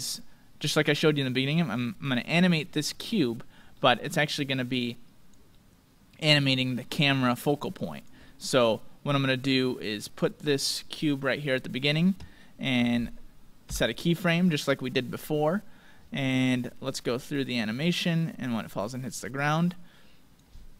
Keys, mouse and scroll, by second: 2.9-7.2 middle drag, 4.7-6.6 drag, 7.0-9.5 drag, 8.3-10.0 middle drag, 10.0-12.0 drag, 11.5-13.4 middle drag, 16.9-18.8 drag.